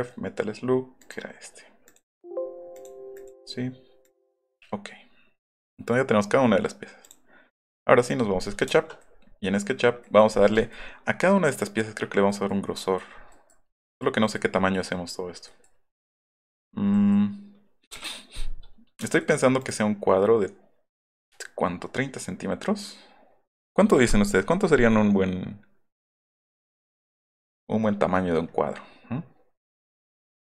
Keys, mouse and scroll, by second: 1.0 click, 1.8 click, 2.1 click, 2.7 click, 3.1 click, 4.0 click, 4.4 click, 8.0 middle click, 8.6 shift+middle click, 9.3 middle click, 10.0 middle click, 10.3 middle click, 10.6 middle click, 10.9 middle click, 11.6 middle click, 12.1 middle click, 12.3 middle click, 12.7 middle click, 13.3 middle click, 13.7 middle click, 14.2 middle click, 14.9 middle click, 15.2-15.6 scroll up 2, 17.1 scroll up 1, 18.4 middle click, 19.6 click, 27.5-28.9 middle drag.